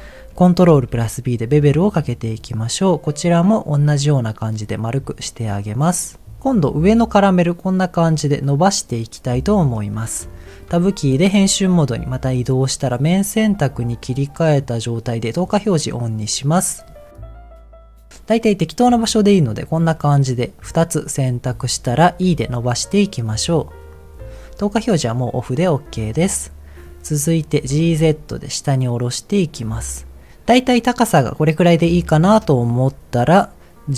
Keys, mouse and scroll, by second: 0.7 ctrl+b, 4.6 click, 5.0 middle click, 6.0 click, 9.6 click, 10.2 click, 10.7 Tab, 11.7 middle click, 13.3 click, 14.0 middle click, 15.7 click, 16.7 middle click, 17.1 scroll up 1, 17.5 shift+click, 18.0 middle click, 18.4 middle click, 20.0 middle click, 22.2 e, 23.9 click, 25.1 click, 25.6 middle click, 26.4 middle click, 27.6 g, 27.8 z, 29.6 click, 30.3 middle click, 31.0-32.6 middle drag.